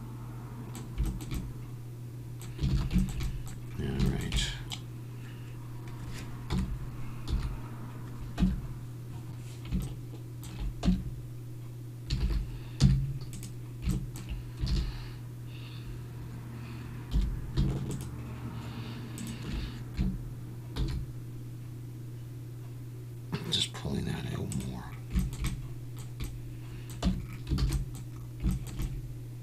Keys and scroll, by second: 2.7 alt+a, 6.5 KP_7, 7.3 z, 8.4 Tab, 10.9 Tab, 12.2 alt+a, 12.8 z, 14.7 alt+a, 17.1 2, 20.8 shift+e, 27.0 Tab, 27.6 alt+a.